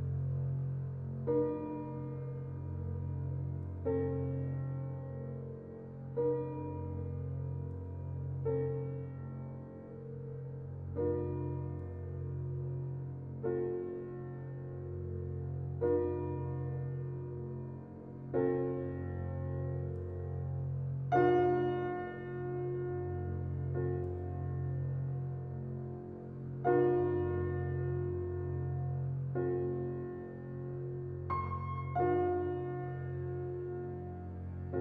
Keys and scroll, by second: 5.4 typing, 22.1 ctrl+g.